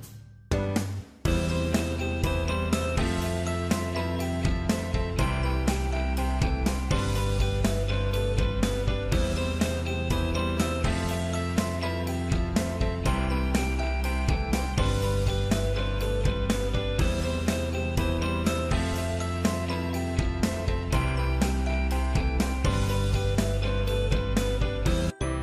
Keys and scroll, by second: 6.8 ctrl+f.